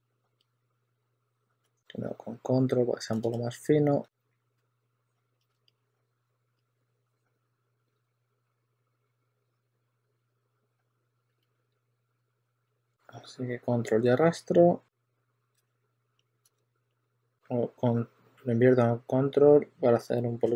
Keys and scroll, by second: 1.7 super+z, 3.2 w, 3.9 q, 4.4 e, 5.4 super+z, 7.4 w, 8.2 w, 10.4-12.7 typing, 15.2 super+w, 15.5 super+z, 16.4 super+z, 17.0 super+w, 20.3 w.